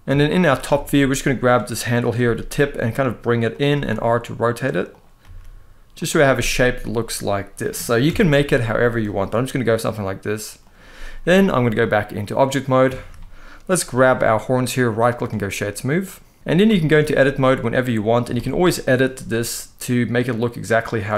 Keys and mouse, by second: 0.5 shift+middle click, 1.1 click, 1.9 g, 3.2 click, 3.4 r, 4.6 click, 4.9 g, 5.6 click, 5.9-7.2 middle drag, 7.7 KP_1, 8.8 click, 9.1 g, 10.3 click, 11.6 click, 12.6 shift+middle click, 13.5 click, 14.4-15.0 right drag, 15.7 middle click, 16.4 Tab, 16.5 shift+middle click, 16.9 middle click, 17.9 g, 18.1 g, 18.6 click, 18.8 s, 20.6 click, 21.0 ctrl+r.